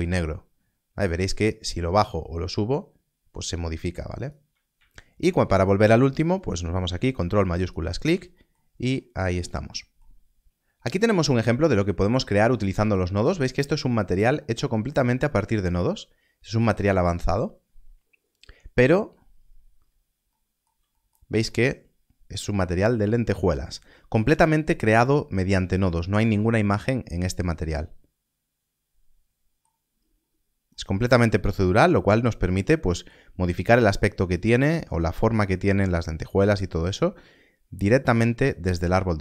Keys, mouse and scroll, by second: 1.1 click, 5.5 scroll up 1, 7.6 ctrl+shift+click, 8.6 scroll down 1, 10.4 scroll up 1, 13.2 click, 13.7 scroll down 1, 13.7 scroll up 1, 19.0 scroll down 1, 29.9 scroll down 1, 33.2-34.6 scroll down 1.